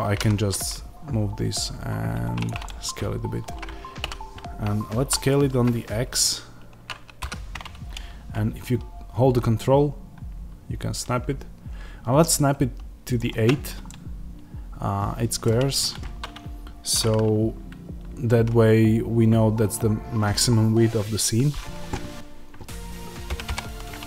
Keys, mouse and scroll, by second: 0.0 g, 2.3 click, 2.5-13.0 middle drag, 3.9 a, 13.0 ctrl+click, 13.7-24.0 middle drag, 23.2 g.